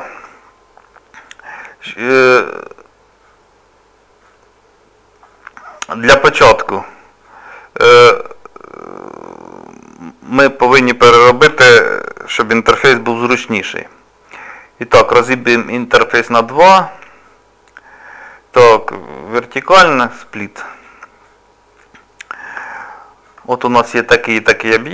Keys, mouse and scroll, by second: 9.5 scroll down 2, 11.4 scroll down 1, 11.4 t, 12.1 middle click, 12.9 t, 15.4 right click, 21.9 scroll up 2, 22.6 scroll up 1, 22.7 shift+middle click, 23.6 middle click, 24.5 click.